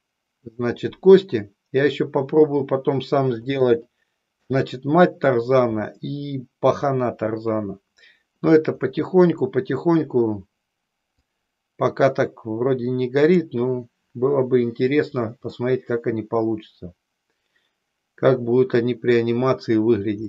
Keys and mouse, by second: 3.7 shift+middle click, 11.1-13.5 drag, 15.6-19.1 middle drag.